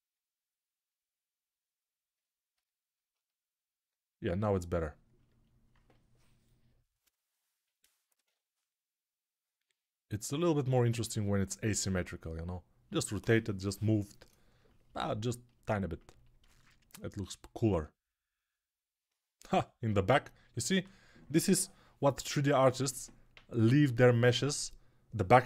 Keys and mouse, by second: 0.0-25.4 typing, 2.9-25.4 alt+middle drag.